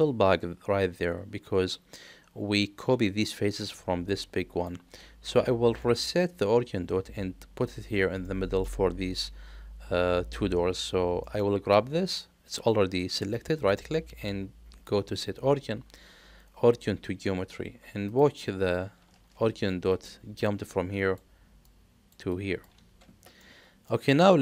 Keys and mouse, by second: 5.8 middle click, 8.2 middle click, 11.2 middle click, 13.5-18.1 right drag, 23.4-23.8 middle drag.